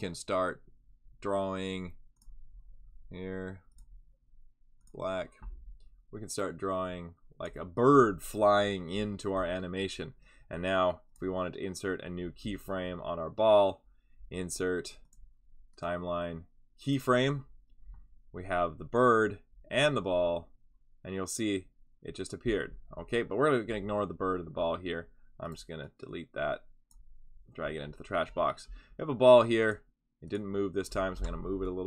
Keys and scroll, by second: 31.1 v.